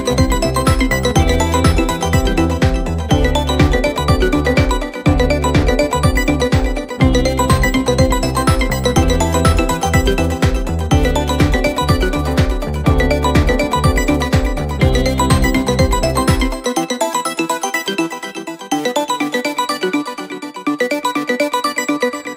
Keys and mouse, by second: 2.2 middle click, 2.4 middle click, 3.3 middle click, 3.9 middle click, 5.5 middle click, 6.0 middle click, 7.5 middle click, 10.7 middle click.